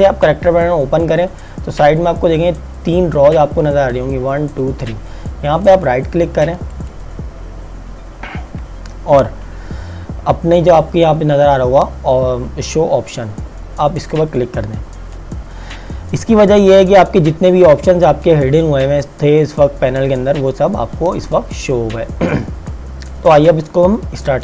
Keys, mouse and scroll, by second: 5.7 right click, 6.8 click, 14.1 click.